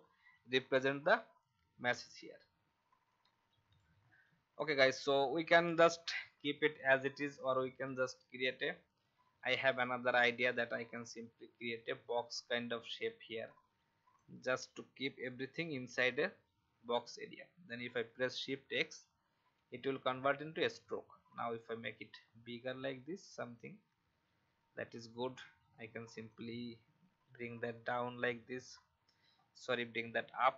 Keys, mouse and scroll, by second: 2.9 F10, 3.6-14.8 drag, 18.5 shift+x, 19.5 v, 21.6 shift+scroll up 1, 26.3-29.1 drag, 29.3 alt+scroll up 1, 30.2 alt+scroll down 1.